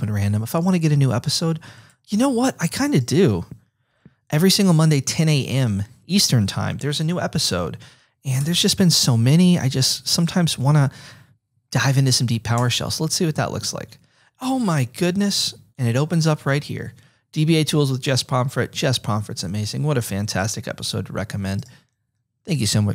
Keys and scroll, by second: 3.9 F8, 8.4-10.4 typing, 10.4 Right, 12.5 Return.